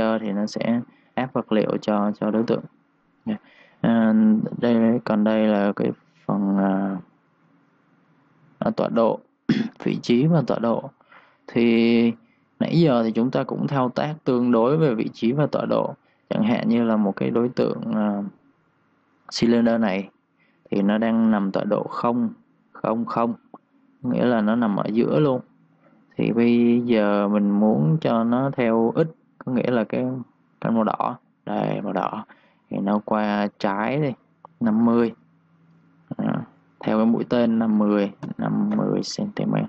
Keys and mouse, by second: 6.7 ctrl+shift+d, 13.9 Escape, 14.9 click, 15.5-16.1 typing, 16.2 click, 20.1 s, 21.5 click, 24.5 2, 24.7 click, 25.1 1, 25.3 click, 34.5 click, 35.9 Home, 37.5 5, 38.7 Return.